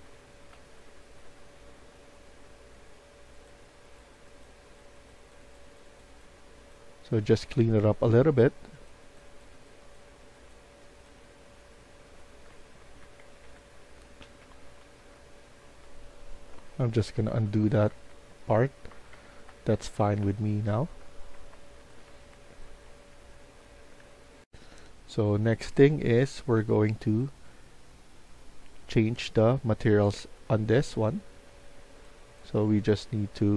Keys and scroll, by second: 0.0-2.3 typing, 7.1 typing, 11.3-15.4 typing, 13.1 Escape, 13.4 Escape, 16.4 ctrl+z, 17.2 ctrl+z, 18.8 Escape, 19.0 Escape, 19.7 Escape, 20.7-22.5 typing, 24.8-27.0 typing, 30.2 Escape.